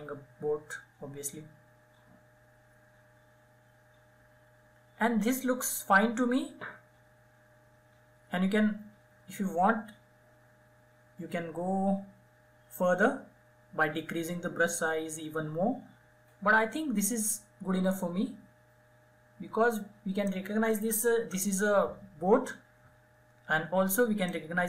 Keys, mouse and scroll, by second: 23.8-24.6 drag.